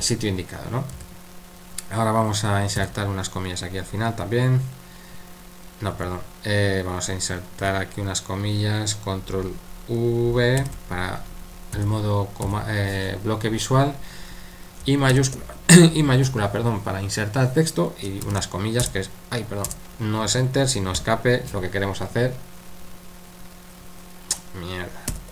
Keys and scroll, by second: 0.9 typing, 2.7 typing, 5.9 Escape, 7.6 typing, 11.7-12.4 typing, 15.1 shift+i, 18.3 shift+', 18.8 Return, 20.9 Escape, 25.1 u.